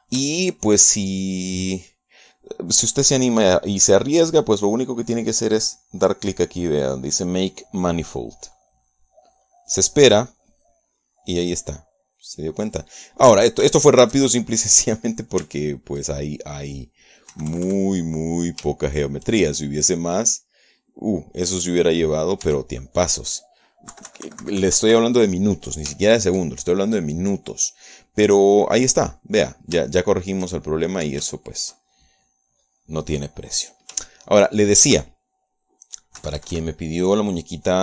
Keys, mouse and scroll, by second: 1.6-3.1 shift+middle drag, 3.4 middle click, 4.0 middle click, 4.7 middle click, 10.7 click, 12.5-14.8 middle drag, 15.0-16.6 shift+middle drag, 16.6 Tab, 18.6 KP_Add, 20.0-21.2 shift+middle drag, 21.2 right click, 21.5 middle click, 21.9-23.4 drag, 23.7 Tab, 24.1 middle click, 25.2 KP_Subtract, 27.2-30.9 shift+middle drag, 31.2 shift+middle click, 32.6 shift+middle click, 33.9 click, 34.7 click, 35.4-37.8 shift+middle drag, 37.4 KP_Add.